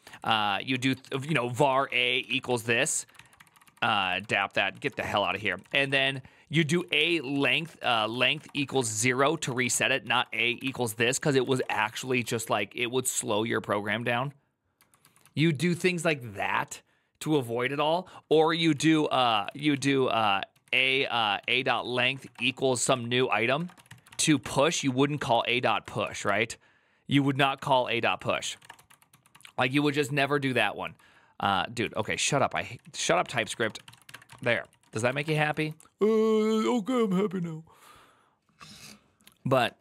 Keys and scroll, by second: 0.0-12.2 typing, 5.1 ctrl+c, 13.6-15.3 typing, 18.1-36.0 typing, 27.2 Tab, 39.5 alt++.